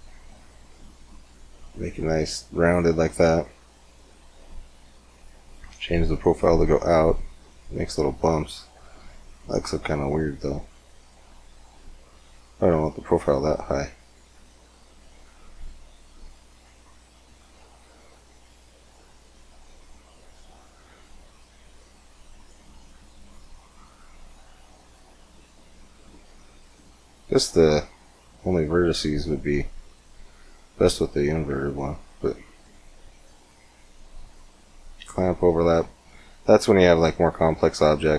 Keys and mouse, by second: 0.0-1.9 middle drag, 2.0 middle click, 4.5-6.5 drag, 6.5-9.1 middle drag, 10.0-22.0 drag, 23.3-24.5 drag, 24.6 middle click, 25.5-27.1 drag, 27.1 middle click, 29.9 click, 30.7 middle click, 32.7-34.4 drag, 34.4 middle click, 34.8-38.1 drag.